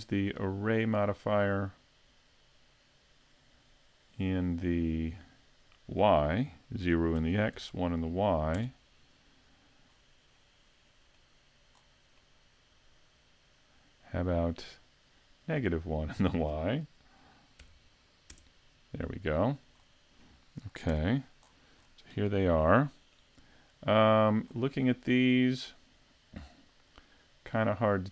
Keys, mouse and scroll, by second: 5.5 click, 9.9 scroll up 4, 10.4 middle click, 11.8-12.4 scroll down 3, 12.2 middle click, 15.8 click, 19.8 scroll up 4, 20.9 KP_Decimal, 21.5-22.0 scroll down 5, 22.2 middle click, 24.5-24.9 scroll up 5, 24.9 middle click.